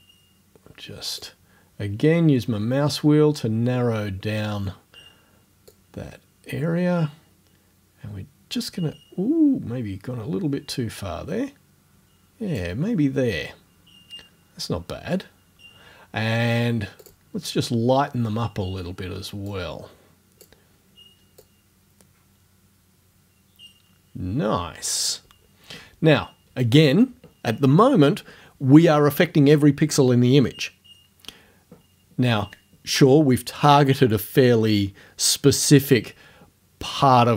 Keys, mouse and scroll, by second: 2.7-3.5 scroll up 2, 4.0 scroll up 2, 5.7-12.8 drag, 17.1 click, 19.5-20.6 drag, 20.6 scroll up 2, 21.4-25.1 drag.